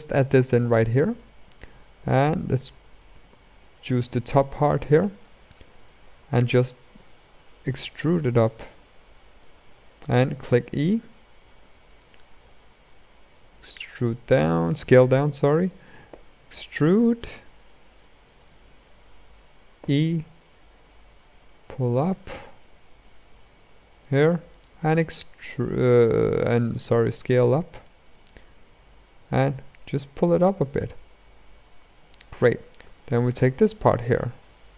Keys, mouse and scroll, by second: 1.9 alt+click, 2.8 a, 3.0 a, 3.6 alt+click, 4.7-6.7 shift+middle drag, 6.7 g, 8.6-10.0 shift+middle drag, 10.0 e, 12.2 s, 15.8 e, 17.7-19.5 shift+middle drag, 19.5 e, 24.1 s, 29.0 g, 31.1-31.7 scroll up 2, 31.7-32.6 scroll down 2, 33.2 alt+click, 34.1 alt+click.